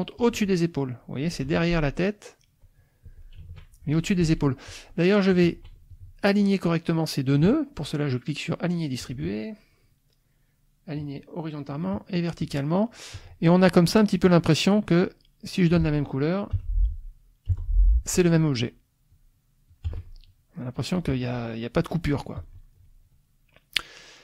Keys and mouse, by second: 0.2 click, 1.4 F2, 2.0 click, 3.3 shift+click, 4.2 click, 4.6 click, 5.4 shift+click, 5.9 shift+click, 9.0 shift+click, 11.0 click, 11.7 click, 12.4 click, 13.1 click, 14.7-15.8 drag, 16.5 F6, 17.5 F7, 17.6 click, 18.1 F1, 18.5 F2, 19.1 click, 19.9 F1, 19.9 click, 22.4 click, 22.7 click.